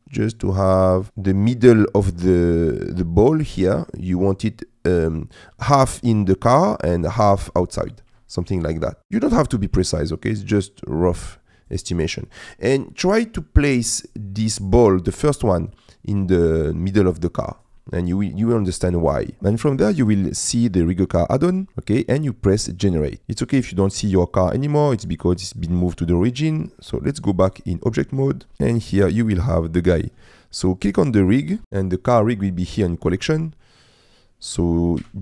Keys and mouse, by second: 1.1 middle click, 2.5 middle click, 3.6 middle click, 6.7 middle click, 7.7 middle click, 8.3 shift+middle click, 8.8 middle click, 10.0-11.8 shift+drag, 12.2 middle click, 12.9 middle click, 14.2 middle click, 15.2 middle click, 16.8 middle click, 17.8 middle click, 19.3 middle click, 19.9 middle click, 22.9 click, 23.2 KP_Decimal, 23.8 middle click, 25.9 shift+middle click, 27.4 click, 28.5-29.7 middle drag, 31.6 KP_Decimal, 33.7 middle click, 35.0 g.